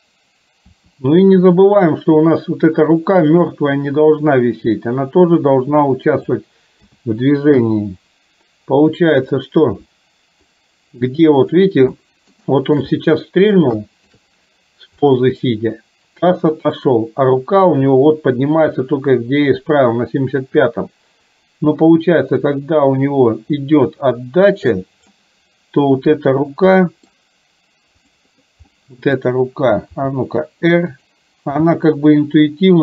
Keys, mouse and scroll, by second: 0.9 r, 3.4 click, 4.4-6.5 drag, 6.9 a, 7.8 i, 9.3 click, 10.5-11.7 drag, 12.0 shift+middle drag, 12.5 shift+middle click, 13.0 middle click, 13.9 shift+middle click, 15.2-25.2 drag, 26.9 middle drag, 28.2 drag, 28.8-29.3 middle drag, 30.2 r, 31.7 g.